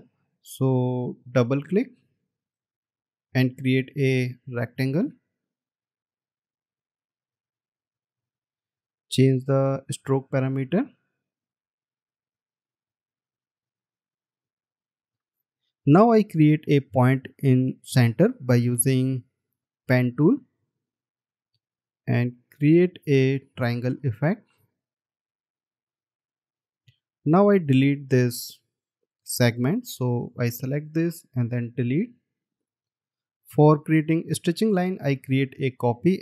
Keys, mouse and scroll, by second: 1.7 double click, 2.7 space, 15.4 alt+scroll up 1, 20.3 alt+scroll up 1, 24.9 Up, 27.4 scroll down 1.